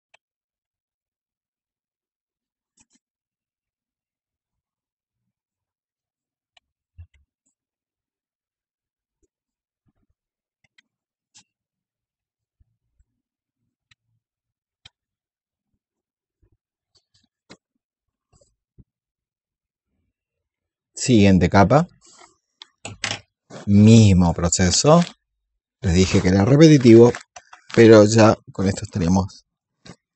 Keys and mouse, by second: 0.2 shift+click, 0.7 click, 0.9 alt+click, 1.3 click, 1.8-3.6 shift+drag, 3.7 shift+click, 4.5 alt+click, 5.7 click, 5.9 alt+click, 6.4 click, 6.6 shift+click, 7.1 alt+click, 7.4 click, 8.0 click, 8.3 shift+click, 8.7 click, 9.2 shift+click, 9.3 click, 9.9 shift+click, 10.6 click, 11.3 click, 12.3 click, 12.7 click, 13.5 click, 14.2 click, 14.4 shift+click, 15.2 shift+click, 16.2 click, 16.5 shift+click, 17.7 click, 18.8 click, 19.4 click, 20.6 alt+click, 24.0 ctrl+click, 26.5 KP_8, 28.0 click, 29.2 alt+click.